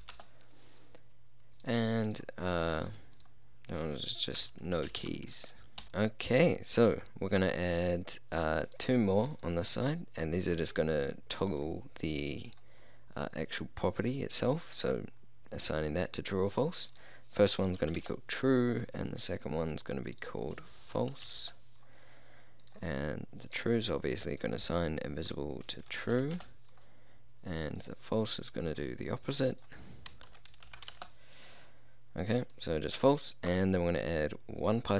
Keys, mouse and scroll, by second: 6.9 click, 9.3-10.5 drag, 11.2 click, 13.3 click, 21.8 click, 22.6-24.3 drag, 24.9-26.3 drag, 27.8-31.8 drag, 34.7 click.